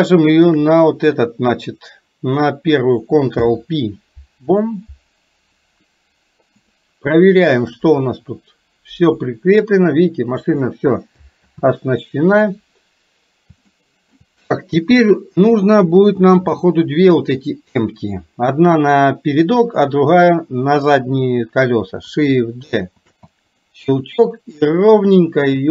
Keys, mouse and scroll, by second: 0.3 shift+click, 3.5 ctrl+p, 6.7 click, 7.7-10.5 drag, 11.5 ctrl+z, 13.8 shift+middle click, 16.3 click, 23.0 shift+d, 24.2-25.7 drag.